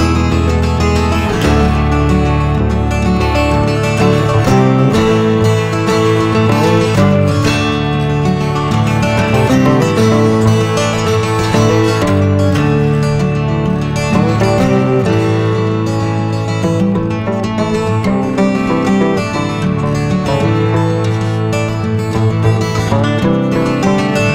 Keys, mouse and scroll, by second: 0.6 click, 1.2-2.1 scroll up 10, 3.1-4.5 drag, 4.5 scroll down 2, 5.3 shift+d, 5.6 g, 6.4 scroll down 1, 6.8 shift+d, 7.0 g, 8.1 shift+d, 8.2 g, 9.2 shift+d, 9.5 g, 10.3 click, 10.4 click, 10.6 click, 10.7 middle click, 10.8 scroll down 7, 11.0 middle click, 11.2 click, 11.3 middle drag, 11.6 scroll up 4, 11.7 middle drag, 11.9 scroll down 6, 12.0 middle click, 12.4 ctrl+s, 12.6 KP_0, 13.1-13.8 scroll down 1, 13.8 scroll down 5, 14.0 ctrl+s, 14.5 click, 15.7-18.7 drag, 19.0 ctrl+s, 19.1 shift+a, 21.3 scroll up 6, 21.3 click, 22.7 s.